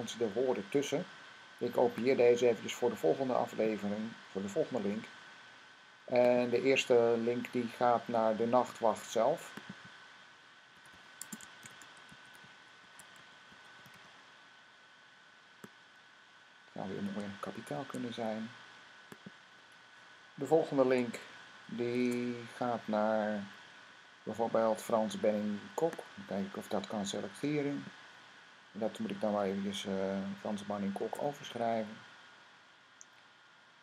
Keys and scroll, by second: 4.6 c, 10.3-14.2 typing, 17.5 n, 20.7 v, 21.8 Tab, 22.7-23.3 typing, 30.8 Tab.